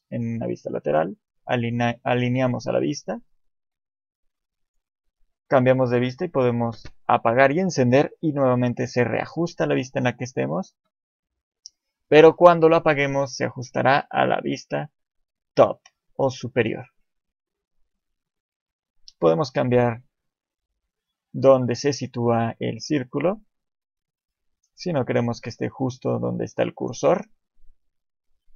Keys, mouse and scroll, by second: 0.2 click, 2.3 KP_1, 4.6 click, 8.5 click, 8.6 KP_7, 10.8 click, 19.2 click.